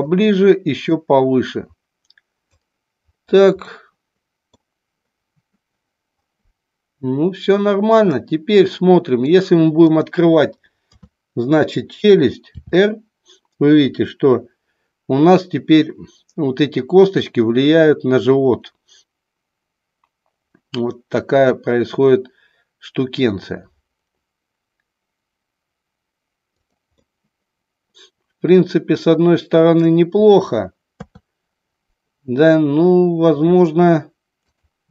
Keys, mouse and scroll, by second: 1.0-2.6 drag, 3.7-4.6 middle drag, 8.2-9.4 middle drag, 9.8 click, 10.8 KP_3, 12.6 r, 26.7 click, 26.9-29.8 middle drag, 30.9 KP_3, 34.4 click.